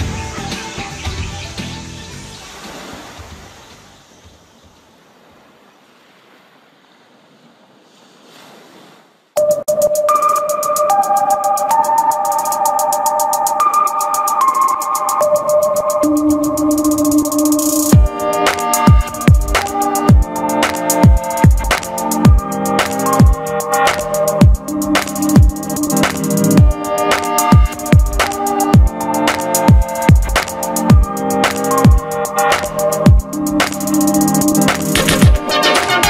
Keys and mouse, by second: 1.1 Tab, 2.0 q, 2.5-3.5 drag, 3.5 q, 3.9 click, 4.0 q, 5.1 z, 6.9 ctrl+a, 7.3-17.9 middle drag, 17.9 a, 21.8 z, 22.5 a, 23.6 q, 25.2 g, 25.9 s, 26.8 g, 28.1 q, 28.7 g, 30.2 q, 30.7 click, 31.1 middle click, 32.0 ctrl+z, 32.9 q, 33.8 ctrl+a, 35.4 BackSpace.